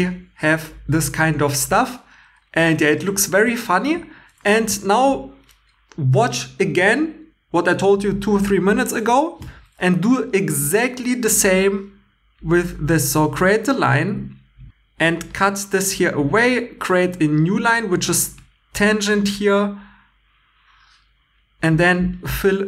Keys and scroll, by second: 4.6 shift+e.